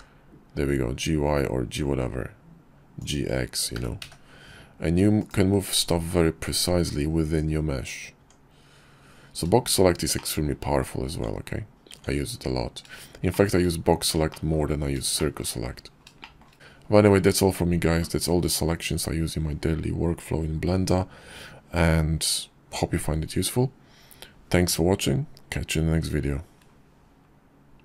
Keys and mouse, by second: 2.8 g, 7.3 Tab, 9.2 shift+middle click, 10.2 Tab, 11.0 Tab, 12.4 shift+middle drag, 13.4 shift+middle click, 14.3 shift+middle drag, 15.3 shift+middle drag.